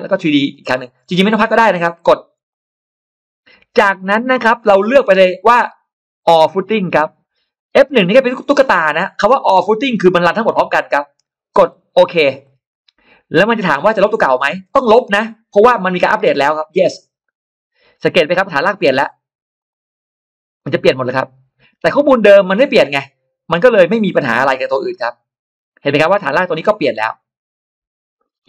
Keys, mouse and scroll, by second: 0.3 click, 2.4 click, 4.3 click, 5.5 click, 6.1 click, 12.2 click, 17.0 click, 19.4 click, 20.4 click, 21.7 click, 22.7 click, 24.8 click, 25.7-26.3 scroll up 1, 26.3-28.1 middle drag.